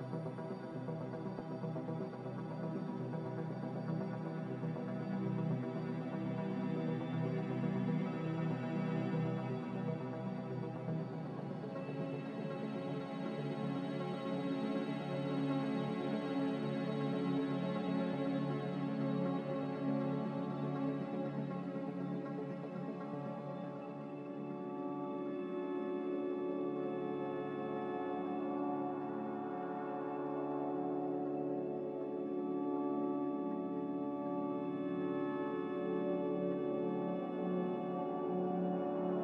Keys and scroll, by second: 24.0-25.1 typing, 27.1 Tab, 29.1 Return, 32.2 z, 32.2 x, 34.5-35.2 typing, 35.4 Return, 38.7 ctrl+z.